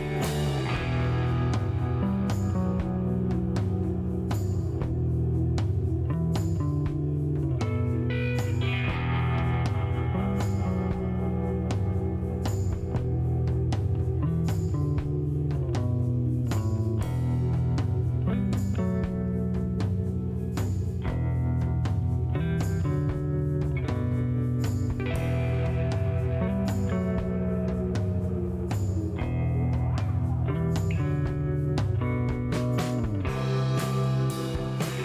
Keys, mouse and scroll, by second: 1.4 middle click, 1.9 click, 2.7 click, 3.3 middle click, 4.4 click, 5.6 click, 7.6 click, 8.9 click, 10.3 click, 11.7 KP_1, 12.0 KP_0, 12.3 KP_Enter, 13.2 middle click, 16.8 click, 18.7 click, 20.6 click, 21.9 click, 23.6 click, 25.3 click, 26.9 click, 28.7 click, 30.8 click, 31.4 click, 32.9 click, 34.4 click.